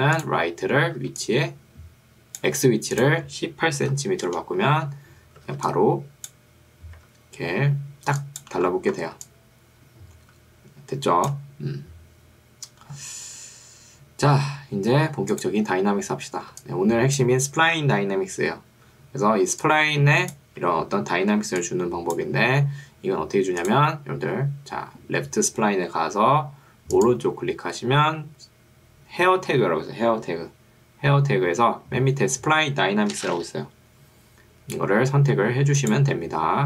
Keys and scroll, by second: 1.1 ctrl+2, 2.5 Escape, 3.7 1, 4.1 8, 4.3 Return, 5.5 ctrl+2, 7.1 Escape, 8.1 1, 9.3 3, 16.7 1, 19.5 ctrl+2, 20.7 Escape, 21.5 ctrl+2, 22.5 Escape.